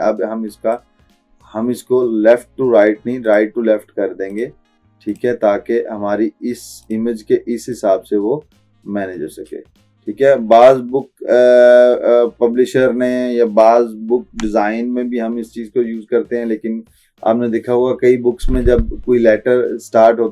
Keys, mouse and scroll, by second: 3.3-20.3 drag.